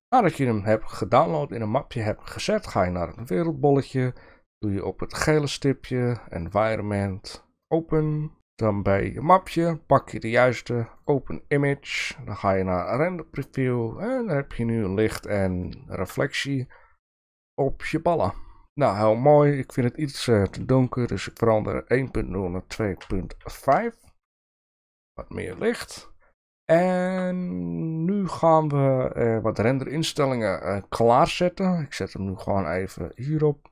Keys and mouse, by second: 15.8 shift+middle drag, 20.0-24.4 drag, 25.9-27.2 shift+middle drag, 33.1 click.